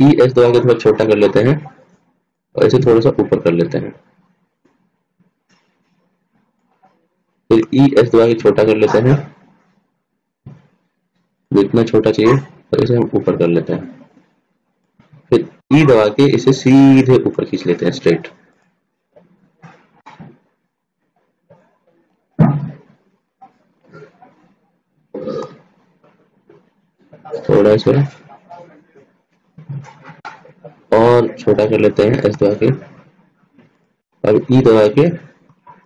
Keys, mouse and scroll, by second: 0.3 e, 3.5-5.0 drag, 8.1 e, 13.4-14.9 drag, 16.1 e, 19.4-20.6 middle drag, 20.6 click, 24.0-25.6 drag, 25.9 s, 30.9 ctrl+z, 32.8 s.